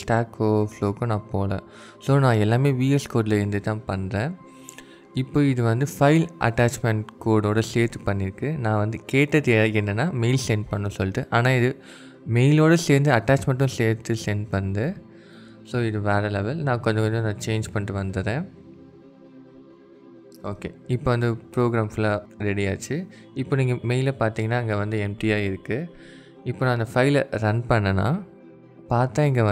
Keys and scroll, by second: 0.4 Tab, 2.6 Tab, 16.7-19.3 typing.